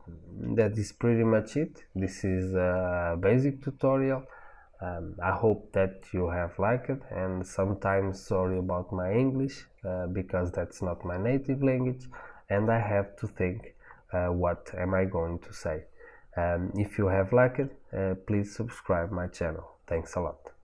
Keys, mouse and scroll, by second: 2.0-7.3 middle drag.